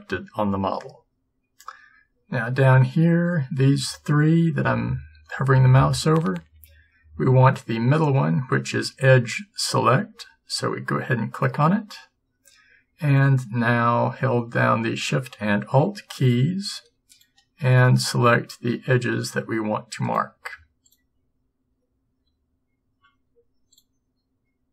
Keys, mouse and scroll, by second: 1.6 click, 11.4-13.4 drag, 13.4 middle click, 17.2-19.0 drag, 19.0 middle click, 20.5-22.8 middle drag, 23.8-24.7 middle drag.